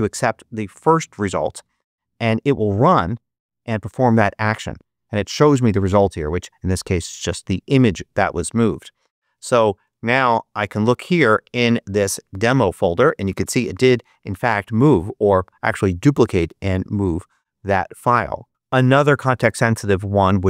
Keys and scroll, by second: 1.5 Return, 9.3 Escape.